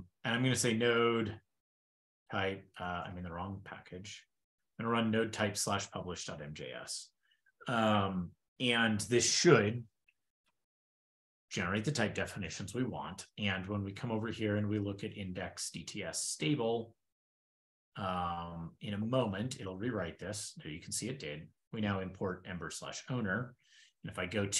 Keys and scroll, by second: 2.6 ctrl+a, 2.6 ctrl+k, 3.0 shift+super+[, 3.8 ctrl+l, 4.2 ctrl+p, 14.6 shift+super+], 17.0 super+Down, 21.4 shift+super+Left.